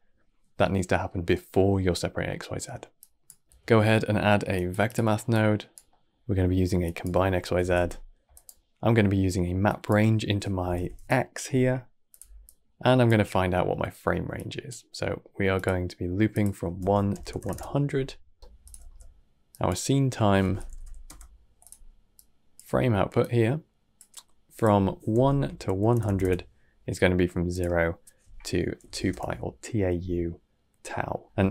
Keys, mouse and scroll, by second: 2.9 click, 5.2 click, 5.8 middle click, 6.1-6.7 scroll up 5, 6.7 click, 8.7 middle click, 9.5 click, 12.3 click, 14.2-15.5 drag, 16.2-17.3 drag, 17.3 KP_0, 19.2 middle click, 19.4 click, 22.0 click, 23.1 click, 24.4-25.9 drag, 25.9 KP_0, 27.4-30.3 drag, 30.3-31.5 middle drag.